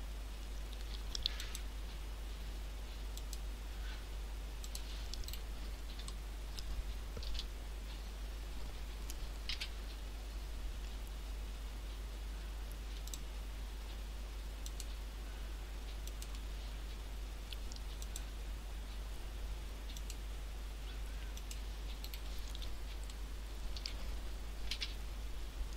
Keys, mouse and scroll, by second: 5.3 right click, 6.1 shift+middle click, 7.6 scroll down 1, 7.9-9.3 scroll up 1, 9.5 c, 22.1 right click, 23.1 shift+middle click, 24.7 c.